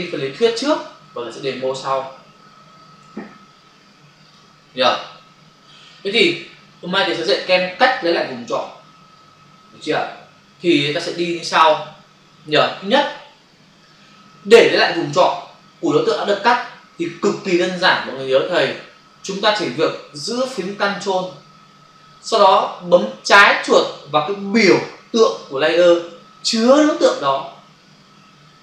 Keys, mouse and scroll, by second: 0.1 alt+Tab, 4.2 click, 4.9 double click, 10.7 click, 11.5 click, 11.7 double click.